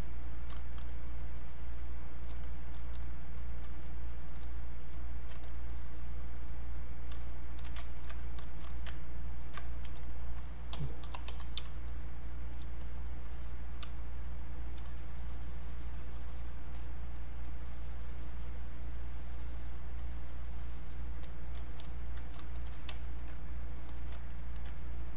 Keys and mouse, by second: 0.9-3.4 shift+drag, 3.4 click, 3.9 shift+click, 5.7-7.2 drag, 7.8 ctrl+right click, 8.1 click, 9.0 ctrl+right click, 10.1 alt+click, 10.7-12.1 typing, 12.0 click, 12.8 click, 13.9 space, 14.2 click, 14.4 space, 14.8-22.1 drag, 22.7 alt+click, 23.0 ctrl+right click, 23.9 alt+click, 24.3 ctrl+right click.